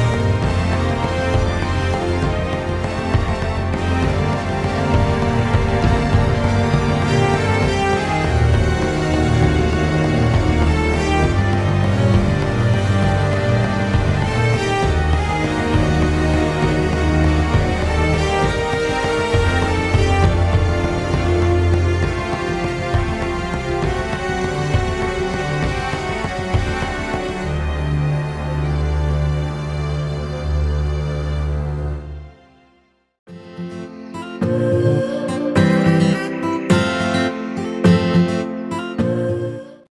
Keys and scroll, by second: 7.3 ctrl+z, 7.6 ctrl+z, 13.3-13.7 ctrl+z, 15.8 ctrl+z, 15.9 ctrl+z, 16.3 ctrl+z, 16.4-17.6 ctrl+z, 20.0-20.6 ctrl+z, 23.1 ctrl+z, 25.5 ctrl+z, 25.5 ctrl+z, 25.7-27.5 ctrl+z, 30.6 ctrl+z, 30.7 ctrl+z, 30.8 ctrl+z, 31.1 ctrl+z.